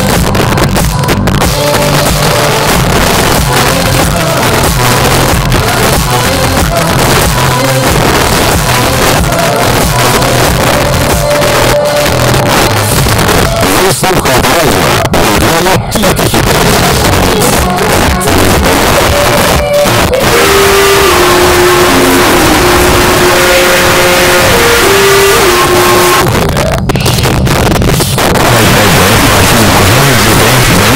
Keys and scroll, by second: 0.0 Up, 0.1 Up, 0.3 Up, 0.4 Up, 0.6 Up, 0.9 Up, 1.0 Return, 26.1 Page_Down.